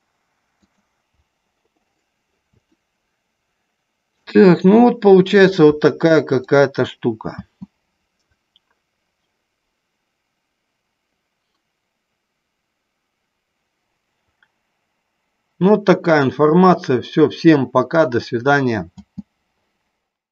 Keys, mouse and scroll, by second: 0.8 click, 1.0 KP_0, 3.1-4.5 shift+middle drag, 6.5 click, 7.7 space, 19.2 space.